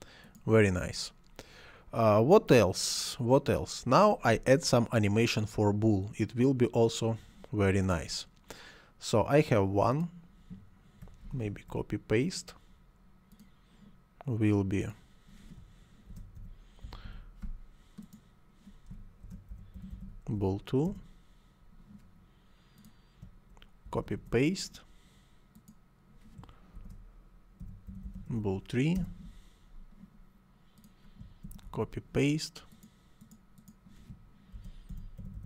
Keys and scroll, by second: 11.2 ctrl+c, 11.4 ctrl+v, 15.9-17.3 typing, 19.0-20.3 typing, 20.8 Return, 23.8 ctrl+c, 24.0 ctrl+v, 26.8-28.8 typing, 28.9 Return, 31.4 ctrl+c, 31.6 ctrl+v, 34.3-35.4 typing.